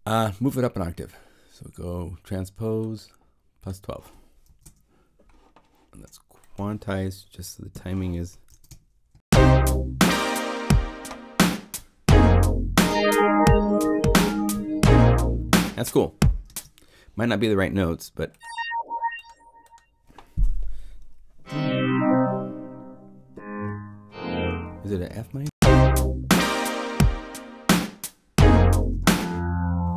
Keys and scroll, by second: 4.4 0, 4.6 Home, 7.7 p, 8.4 0, 9.1 Home, 25.1 0, 25.4 Home, 28.8 0.